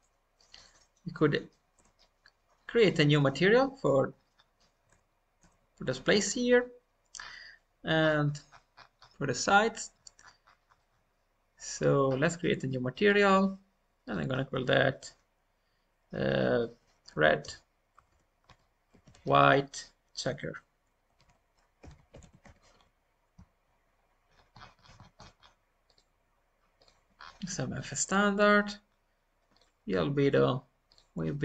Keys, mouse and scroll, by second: 0.5 click, 1.1 middle click, 1.7 Tab, 3.7-4.2 scroll down 3, 6.2 scroll down 4, 7.9 scroll down 1, 10.1 scroll up 7, 10.2 scroll down 1, 12.0-13.9 drag, 17.0-24.2 drag, 24.2-24.7 scroll down 4, 24.7 scroll up 1, 24.7 scroll down 2, 25.8-27.1 drag, 25.8-26.8 scroll down 2, 27.1-28.3 scroll down 2, 28.9-29.4 scroll down 2, 29.4-31.4 drag.